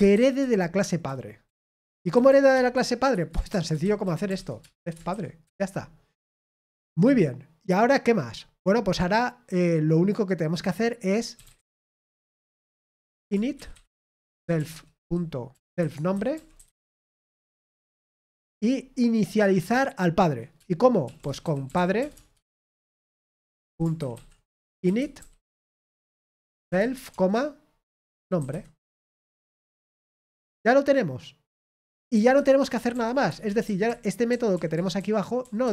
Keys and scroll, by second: 0.0-5.6 typing, 12.4-18.7 typing, 21.6-27.4 typing, 28.7-29.4 typing, 29.4 Escape, 33.0-35.7 typing.